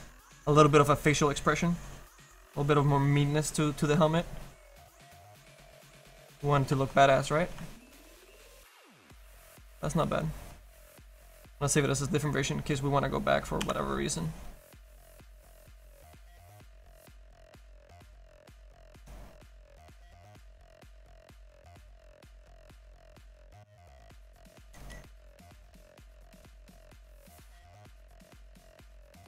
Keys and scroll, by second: 13.7 f.